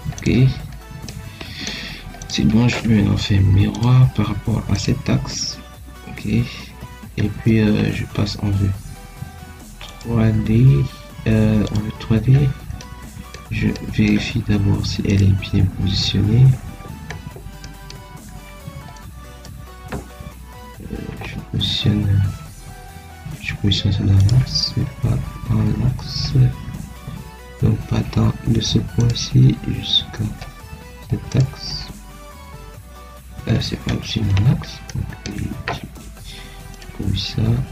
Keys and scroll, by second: 6.5 Escape.